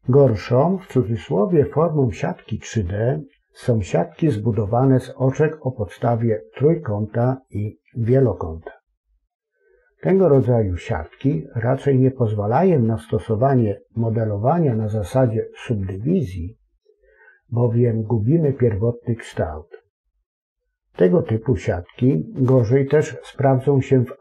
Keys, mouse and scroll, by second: 0.5 space.